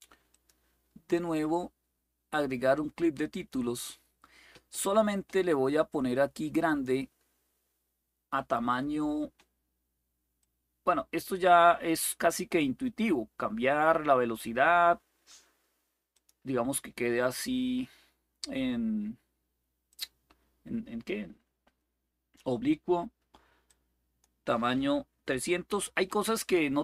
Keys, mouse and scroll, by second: 0.0 click, 3.0 click, 6.4 click, 10.1-14.2 drag, 15.9 click, 19.6-22.1 drag, 23.4 click, 25.4-26.1 typing.